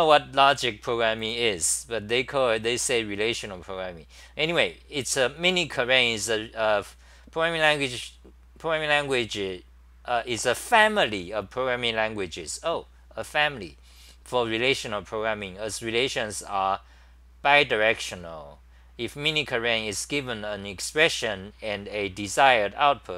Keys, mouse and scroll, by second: 9.8-10.6 typing.